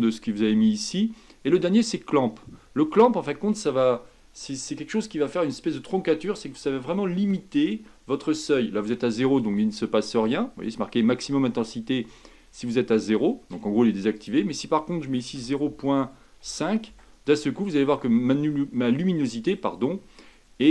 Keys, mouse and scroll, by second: 19.2-20.7 middle drag.